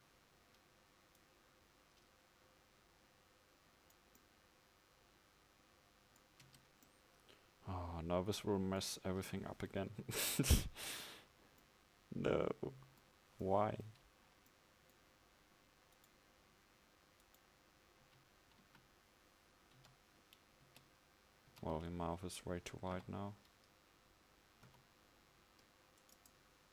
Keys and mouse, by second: 6.6 Tab, 7.9 Tab, 11.0 KP_5, 18.1 KP_1, 18.6 KP_5, 20.7 Tab, 21.6 a, 23.0 z.